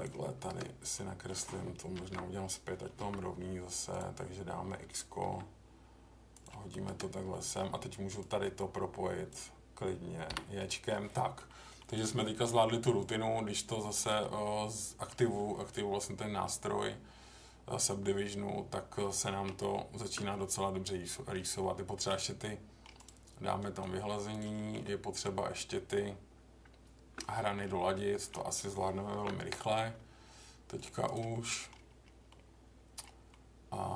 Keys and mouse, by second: 0.9 middle click, 2.0 ctrl+z, 3.0 k, 7.3 middle click, 8.2-9.3 drag, 10.3 j, 10.7 middle click, 11.4 middle click, 12.2 middle click, 14.4 middle click, 16.4-19.0 middle drag, 19.5 Tab, 20.3-21.3 middle drag, 21.6-22.1 middle drag, 22.4-22.8 middle drag, 23.7-24.4 right drag, 24.5 middle drag, 25.3 Tab, 27.3 middle click, 28.0 middle click, 29.1 ctrl+r, 31.3 middle click, 32.2 middle click, 33.3-33.9 middle drag.